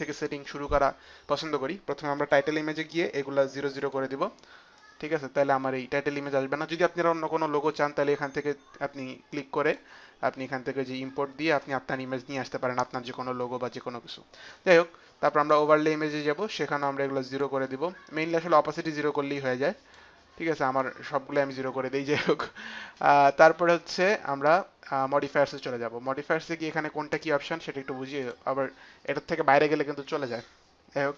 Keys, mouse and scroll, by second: 2.2 click, 4.7 click, 9.6 click, 15.3 click, 16.8 click, 19.4 click, 19.6 click, 20.8 click, 25.4 click, 28.1 click, 29.6 click.